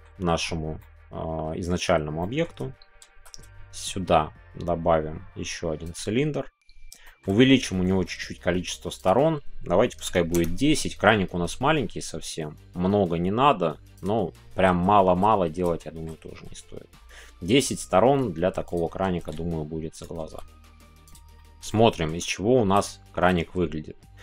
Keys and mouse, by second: 0.7 middle click, 2.2 middle click, 3.0 shift+a, 7.0 shift+middle click, 7.8 shift+middle click, 9.0-11.1 drag, 13.9 click, 13.9 s, 14.9 middle click, 15.8 shift+middle click, 18.6-19.9 drag, 18.6 z, 19.9 right click, 21.3 middle click, 21.7 middle click, 22.8 middle click.